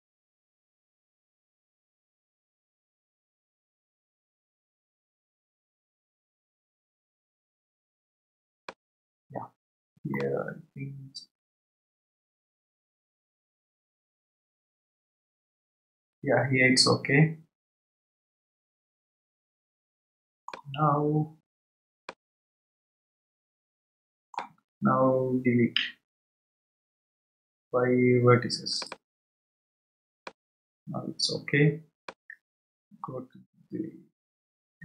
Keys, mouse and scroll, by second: 10.1-13.2 middle drag, 22.0-25.2 middle drag, 26.8 Delete, 30.2-32.5 middle drag, 32.5 scroll down 3.